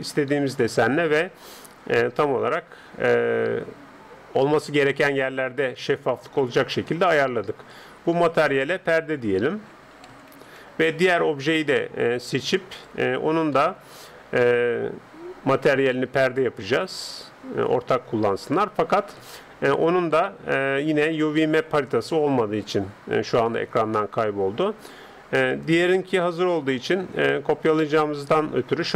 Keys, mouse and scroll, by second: 0.8 middle click, 1.1 middle click, 1.8-2.4 scroll up 2, 5.6-8.6 middle drag, 8.4-10.2 drag, 12.8-14.8 right drag, 16.3-18.1 drag, 19.4-19.9 scroll up 1, 19.9-21.9 middle drag, 25.5-27.3 drag, 27.3-28.9 middle drag.